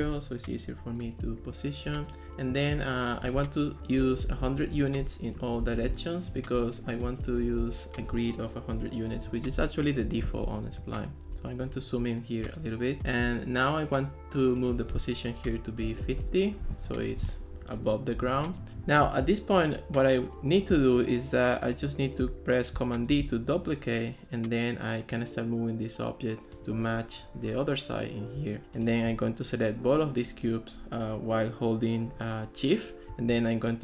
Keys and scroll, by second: 0.0 Return, 4.0 1, 4.3 0, 4.8 Return, 5.4-7.9 typing, 15.5 5, 15.8 0, 16.1 Return, 23.1 super+d.